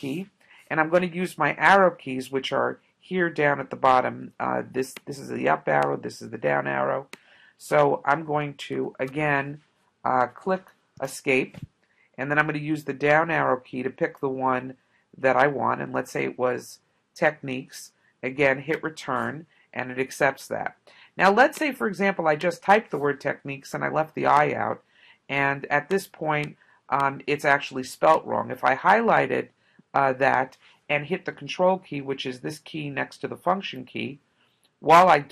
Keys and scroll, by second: 5.0 Down, 5.9 Up, 8.8 BackSpace, 11.0 Escape, 13.1 Down, 13.6 Down, 14.1 Down, 14.5 Down, 15.1 Down, 15.9 Up, 18.7 Return, 23.4 BackSpace.